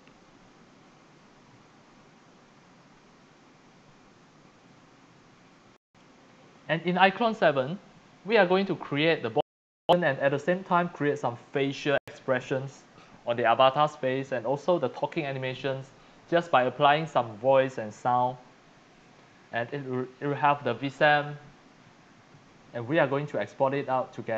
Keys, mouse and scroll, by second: 23.1 click, 23.7 click.